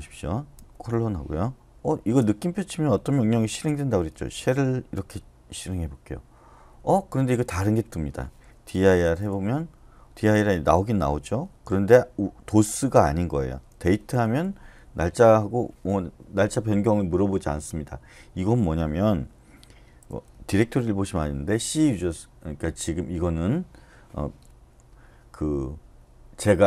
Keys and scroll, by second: 0.5 :, 2.0 !, 3.8-4.1 typing, 5.0 Return, 8.5-9.3 typing, 13.7-14.2 typing, 14.3 Return, 19.8-20.5 typing.